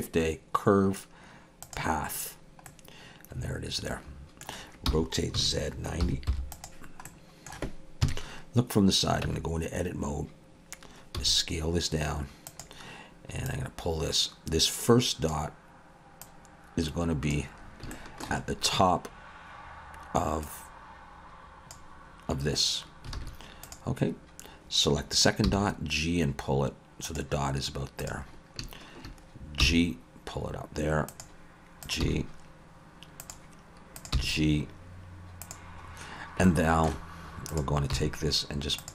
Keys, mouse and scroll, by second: 2.7 middle click, 4.9 r, 7.1 middle click, 8.0 KP_3, 9.2 Tab, 11.2 s, 13.5 click, 16.2 click, 17.6 scroll up 3, 17.9 shift+middle click, 18.4-19.1 scroll up 1, 20.4 click, 23.2 alt+a, 23.6 click, 25.4 g, 28.0 click, 28.3 scroll down 2, 29.6 g, 31.8 click, 32.0 g, 34.0 click, 34.2 g, 35.9-36.5 scroll up 3, 36.5 shift+middle click, 37.5 click, 37.9 g.